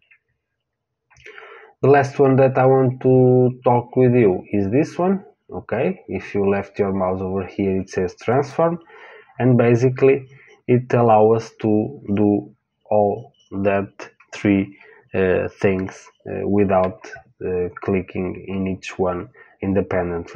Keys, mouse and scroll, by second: 8.3 click.